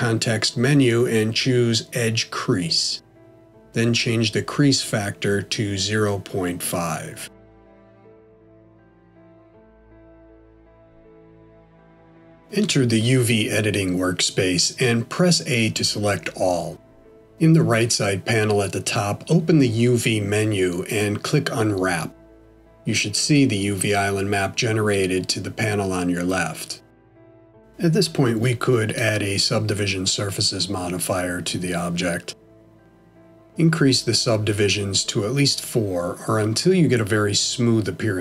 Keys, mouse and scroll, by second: 7.7 click, 11.3 middle click, 27.9 click, 28.9 middle click, 31.1 click, 32.1 click, 35.1 click, 35.3 click, 36.0 click, 36.9 middle click.